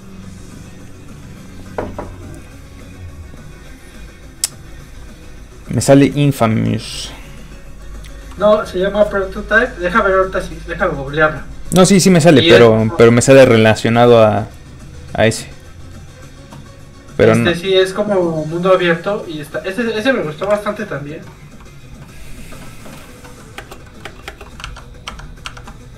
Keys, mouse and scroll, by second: 10.4 scroll down 1, 10.9 click, 11.3 scroll down 1, 11.9 click, 14.1-14.5 scroll down 1, 14.7 click, 16.5 scroll down 1, 17.1 click, 20.5 ctrl+w, 23.4 middle click, 23.6 space, 23.9 middle click, 24.1 space, 24.7 alt+Tab, 25.1 alt+Tab.